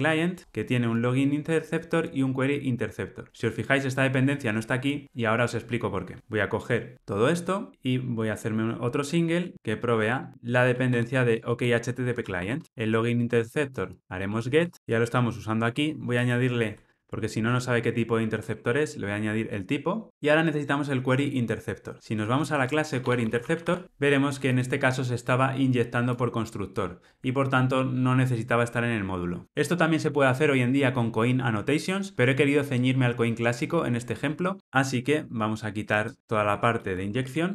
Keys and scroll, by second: 7.7 super+c, 10.3 super+v, 12.3 alt+super+l, 12.6 ctrl+alt+o, 18.3 Return, 36.3 alt+shift+Right, 36.7 alt+shift+Left.